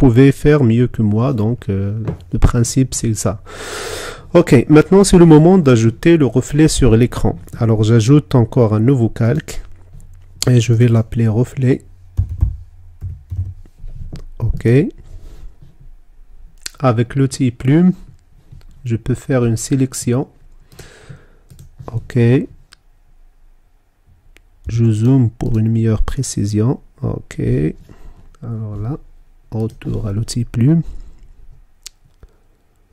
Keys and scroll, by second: 25.0 z.